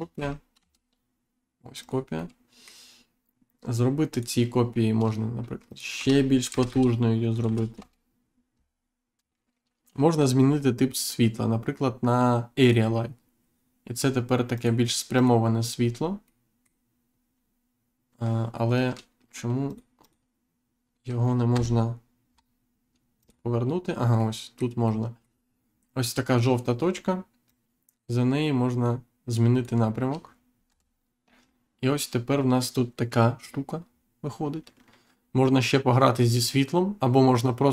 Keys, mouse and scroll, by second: 0.1 shift+d, 0.5 shift+z, 1.7 click, 2.1 middle click, 4.0 click, 5.6 click, 5.9 2, 7.7 Return, 12.5 click, 14.5 click, 15.1 click, 15.9 scroll down 1, 16.2 middle click, 17.3-17.7 scroll up 1, 19.6 click, 21.5 Insert, 22.2-22.6 scroll down 1, 23.1 click, 24.1 middle click, 27.4 click, 30.6 Insert.